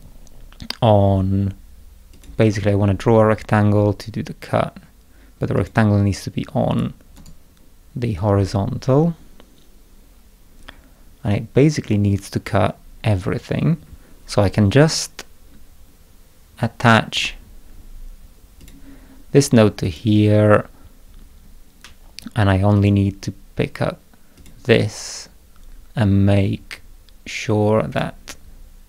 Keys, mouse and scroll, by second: 2.1 click, 5.5 click, 6.7 click, 7.1 right click, 17.1 click, 18.6 click, 19.8 click, 22.7 click, 24.3 click, 27.9 click.